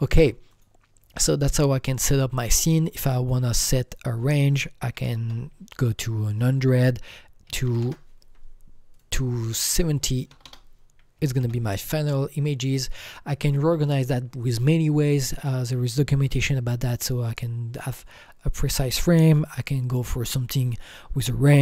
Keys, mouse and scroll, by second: 0.5-5.2 drag, 4.8 KP_1, 5.0 KP_0, 5.2 KP_0, 6.6 KP_Subtract, 7.4 KP_2, 7.6 KP_Subtract, 7.6 KP_5, 7.8 KP_0, 8.9 click, 9.5 click, 10.3 BackSpace, 10.4 BackSpace, 11.1 KP_7, 11.4 KP_0, 12.5 click.